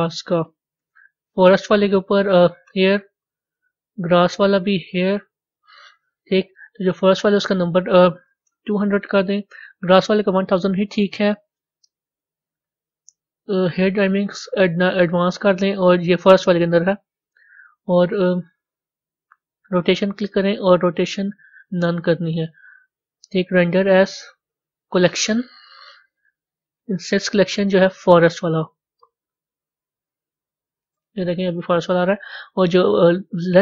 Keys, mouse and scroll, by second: 0.7 s, 2.5 click, 4.6 click, 6.0 click, 13.5 click, 14.7 click, 20.0 click, 21.5-29.4 drag, 29.4-30.0 scroll up 6, 29.6 middle click, 30.5 middle click, 30.5-31.0 scroll down 3.